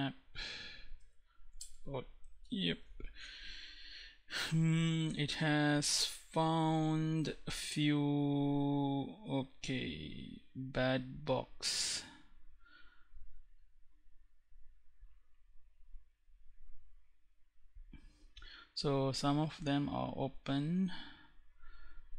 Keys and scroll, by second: 0.4 Tab, 0.9 Return.